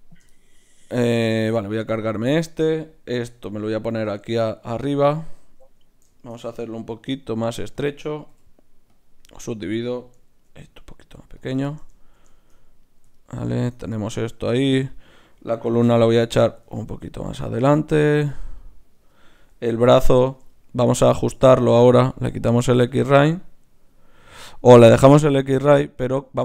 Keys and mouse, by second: 0.0-2.2 drag, 1.5 x, 3.2 g, 6.9 ctrl+alt+s, 8.3 w, 9.6-11.4 right drag, 11.1 ctrl+alt+s, 11.5 click, 11.7-12.8 middle drag, 12.8-16.7 right drag, 13.6 click, 15.7 g, 16.7-18.6 middle drag, 18.6-20.2 right drag, 20.2-22.6 middle drag, 22.6-26.4 drag.